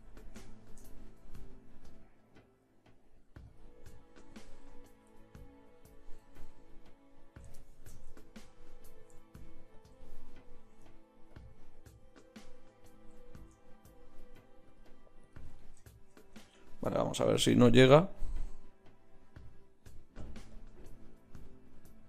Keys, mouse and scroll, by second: 3.5-7.4 drag, 9.7-16.4 drag, 16.4 Tab, 17.0 click.